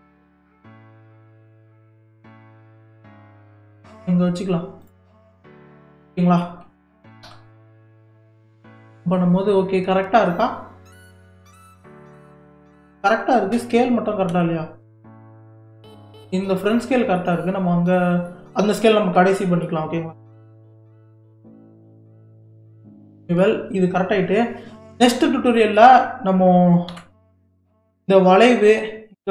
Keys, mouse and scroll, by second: 0.8 g, 5.4-7.3 middle drag, 7.3 KP_3, 8.1 scroll up 5, 9.0-9.9 scroll up 2, 9.9 scroll down 1, 10.9-13.7 shift+middle drag, 13.7 z, 14.6-15.6 scroll up 5, 15.6-16.1 scroll down 6, 16.1-17.5 middle drag, 17.5-18.2 scroll down 1, 18.2 scroll down 1, 18.3-20.3 middle drag, 20.3 KP_3, 20.9-21.6 scroll up 3, 21.6-22.7 shift+middle drag, 22.7-23.2 scroll down 1, 23.2-23.5 shift+middle drag, 23.5-24.5 scroll down 1, 24.5-25.6 scroll down 4, 25.6-26.9 middle drag, 26.9 KP_3.